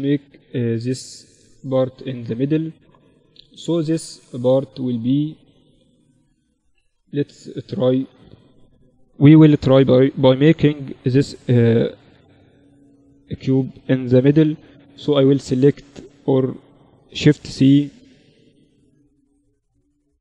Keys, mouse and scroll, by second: 1.6-5.4 drag, 4.9 shift+a, 11.0 shift+a, 13.6 s, 15.4 x, 16.6 shift+c.